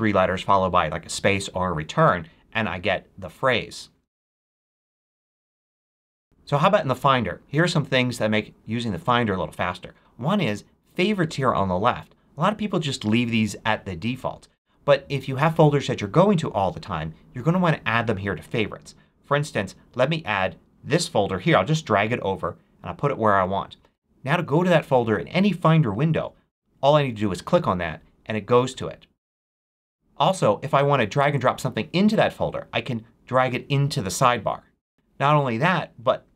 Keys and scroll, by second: 4.0-5.3 typing.